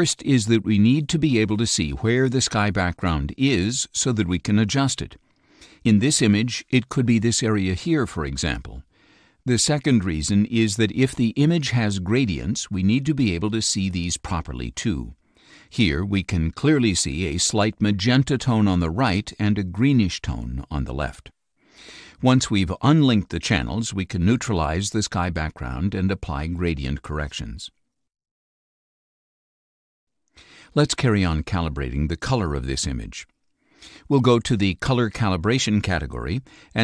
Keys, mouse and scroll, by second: 17.2-19.5 drag, 19.8-28.9 drag, 29.0 click, 33.7 click.